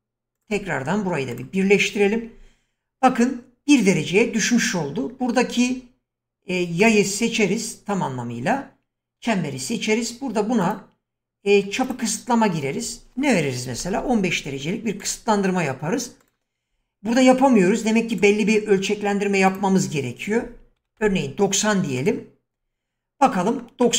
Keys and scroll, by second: 13.4-14.4 typing, 20.5-21.5 typing.